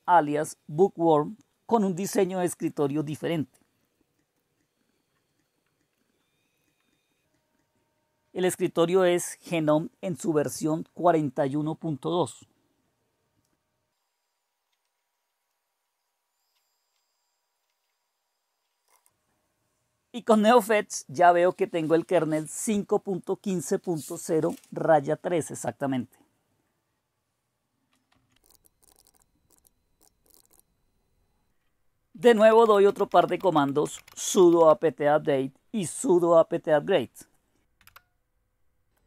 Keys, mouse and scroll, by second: 0.0-1.3 typing, 0.3 click, 1.3 click, 2.4 right click, 2.6 click, 3.8-4.8 drag, 5.3-5.9 scroll down 2, 5.9 click, 6.5 click, 7.2-8.3 scroll down 1, 8.3-9.3 scroll down 1, 9.3-12.1 scroll down 1, 14.0 scroll up 1, 14.2 scroll down 1, 14.6 click, 14.8 right click, 15.2 click, 15.8 click, 16.2-18.0 drag, 18.1 click, 18.6-19.5 typing, 27.8-35.1 typing, 37.9 Return, 39.0 Return.